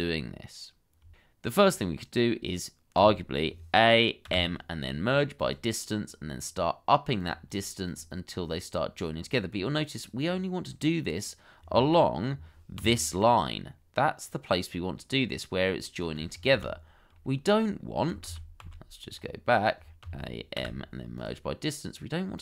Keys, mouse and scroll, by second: 0.6 shift+middle click, 1.0 scroll up 1, 3.1 a, 4.2 m, 7.5 double click, 10.2 double click, 11.1 scroll up 1, 12.8 d, 16.5 ctrl+z, 18.2 ctrl+z, 20.0 a, 20.6 m.